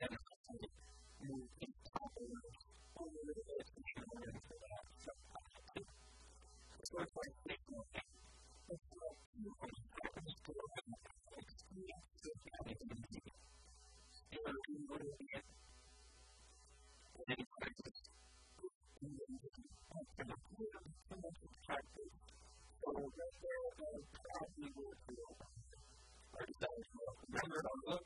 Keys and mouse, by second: 0.2 b, 0.9 b, 2.4-4.4 drag, 3.1 a, 3.3 b, 4.5 click, 7.0 a, 7.1 click, 7.7 a, 8.1 shift+middle click, 8.8 middle click, 9.9 e, 13.5-15.0 drag, 13.7 s, 15.4 s, 16.7 middle click, 17.7 middle click, 18.5 click, 19.7 Tab, 21.1 Tab, 22.7 Tab, 24.1 Tab, 25.3-27.7 shift+drag.